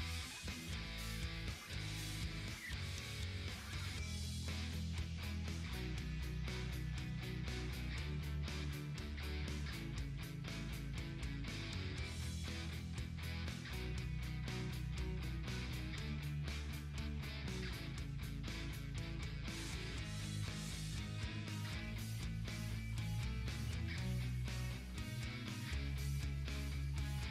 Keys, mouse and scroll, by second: 3.3-3.7 scroll down 1, 3.9-4.3 scroll up 1, 4.3 click, 6.7-7.1 scroll down 1, 7.1 click, 9.1-15.9 drag, 15.9-16.5 scroll down 1, 16.5-17.9 drag, 17.9 ctrl+t, 19.3 click, 23.4-25.3 drag, 25.3 Right.